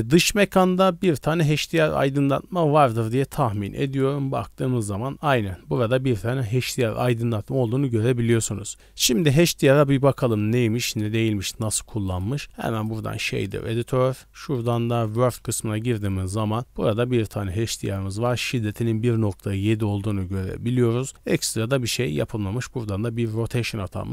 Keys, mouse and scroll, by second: 3.5 click, 3.8 click, 5.0 scroll down 1, 6.1-7.3 scroll down 1, 9.3 click, 10.9 click, 12.1-12.8 drag, 13.3-14.1 drag, 14.6-15.1 drag, 15.3 n, 15.7 scroll up 1, 16.0 scroll down 1, 16.1 middle click, 17.4 middle click, 17.4-17.8 scroll up 2, 18.0 middle click, 18.5-18.8 scroll up 1, 19.2-19.6 scroll down 2, 19.6-20.7 middle drag, 21.1 right click, 23.1 middle click, 23.7 middle click.